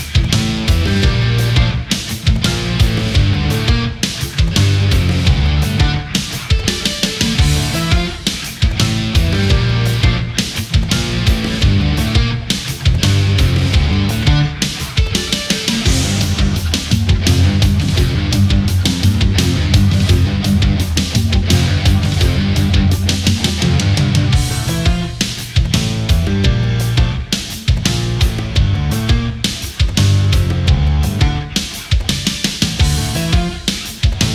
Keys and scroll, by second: 4.1 ctrl+z, 5.5 ctrl+z, 14.1 ctrl+z, 19.7 space, 30.8 ctrl+z.